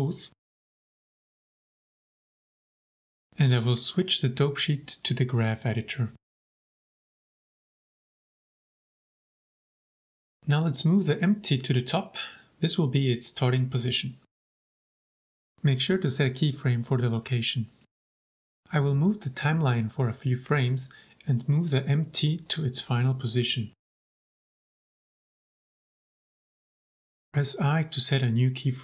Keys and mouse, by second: 0.3 middle drag, 1.2-2.3 middle drag, 2.8 click, 3.5-5.0 drag, 7.3 n, 8.7-9.1 shift+drag, 10.7 g, 10.9 z, 11.9 click, 12.3-12.7 shift+drag, 13.2 shift+click, 13.7 g, 13.8 z, 15.3 click, 16.6 i, 19.2 click, 20.5 shift+click, 21.3 g, 21.4 z, 22.3 drag, 22.9 shift+drag, 23.2 shift+click, 24.3 g, 24.5 z, 25.9-26.4 drag, 27.1 i.